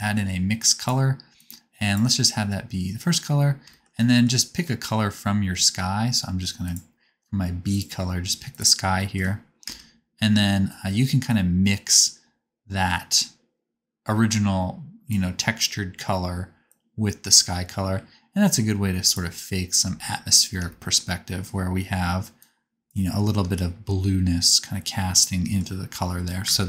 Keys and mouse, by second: 0.5-6.8 drag, 9.6 KP_0, 11.2-13.6 drag, 24.3-26.6 shift+drag, 26.4 space.